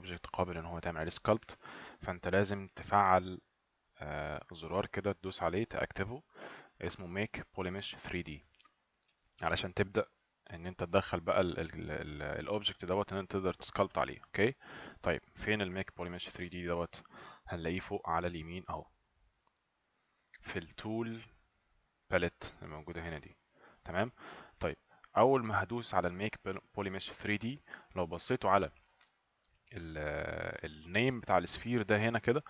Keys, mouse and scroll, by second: 16.6 click.